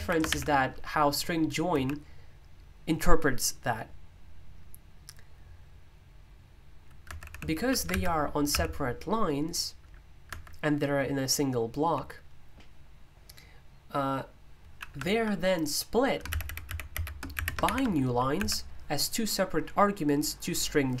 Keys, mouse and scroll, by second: 1.4-2.2 typing, 7.0 Escape, 7.2-8.5 typing, 10.2 Escape, 11.7 j, 16.6-18.4 typing.